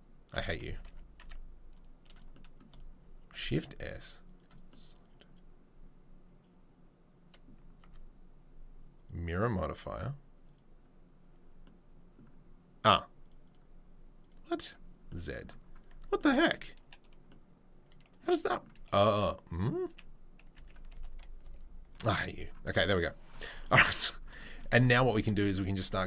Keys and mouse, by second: 1.2 Tab, 3.2 shift+s, 7.8 Tab, 10.5 Tab, 13.3 right click, 13.5-14.2 right drag, 14.3 right drag, 14.6-25.7 right drag, 23.9 Tab, 24.8 ctrl+r, 25.7 shift+middle click.